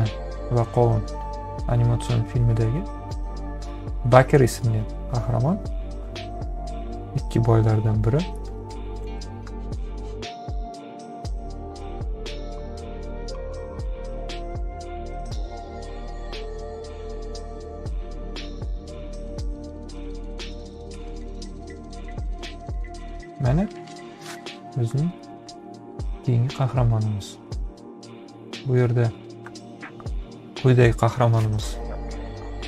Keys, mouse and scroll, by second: 16.9 click, 17.9 click, 18.8 ctrl+z, 19.7 click, 20.7 click.